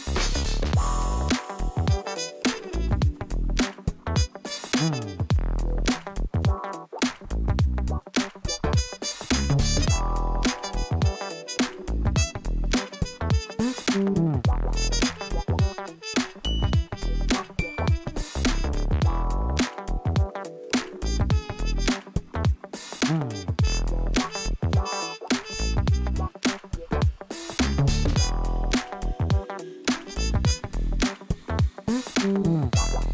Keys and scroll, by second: 1.2 n.